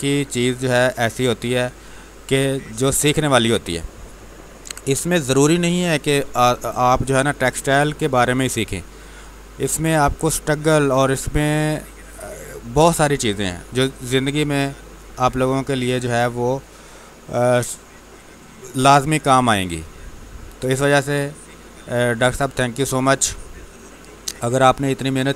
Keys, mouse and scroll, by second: 4.5 ctrl+Num_Lock, 5.1 ctrl+s.